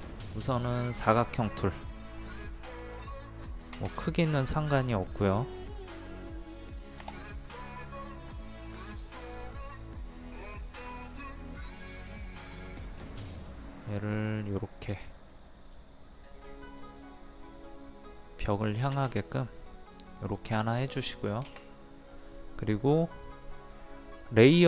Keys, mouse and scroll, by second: 1.2 click, 4.0 middle click, 4.9 click, 6.1 middle click, 7.0 m, 7.7 click, 9.9 click, 12.1 middle click, 13.3 click, 15.4 middle click, 16.7 click, 19.2-21.1 middle drag, 21.2 shift+middle click.